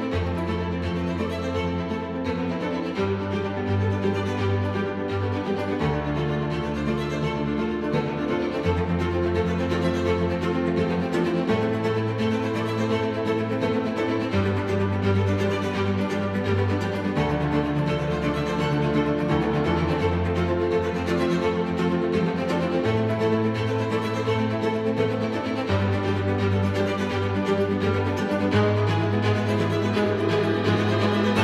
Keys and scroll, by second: 11.6 ctrl+F1.